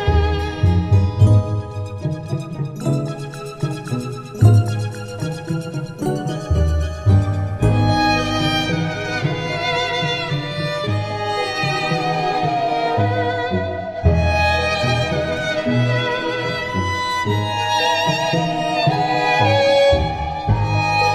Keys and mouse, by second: 1.9 right click, 3.2 middle click, 9.1 middle click, 13.6 middle click, 16.7 middle click, 18.9 right click, 20.3 right click.